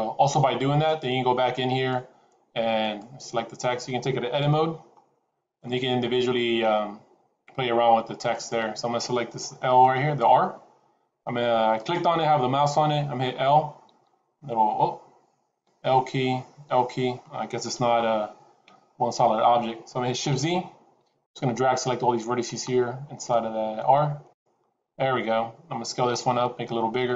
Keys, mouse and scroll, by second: 1.7 click, 3.0 click, 4.3 Tab, 4.8-5.3 scroll up 2, 5.5 middle click, 8.2 click, 11.7 click, 13.8 l, 15.6 l, 16.5 l, 17.6 KP_1, 18.5 KP_Decimal, 19.4-20.0 scroll down 2, 20.3 shift+z, 21.1 click, 24.7-26.1 scroll down 3, 26.1-26.5 scroll down 1, 26.1 s.